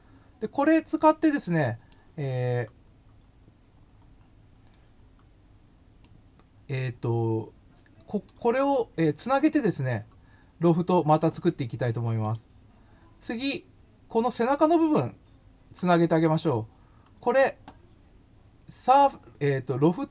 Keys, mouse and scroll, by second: 0.3-1.9 middle drag, 2.4-3.8 scroll down 5, 4.5 scroll up 1, 5.0 scroll down 2, 6.0 scroll up 1, 6.1-8.2 middle drag, 12.2 click, 16.2 scroll up 1, 16.8 scroll down 1.